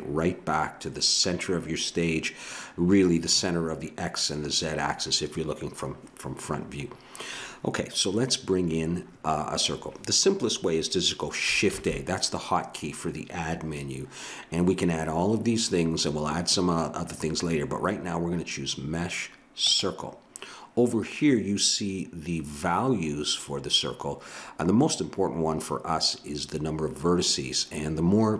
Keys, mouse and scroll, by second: 11.7 shift+a.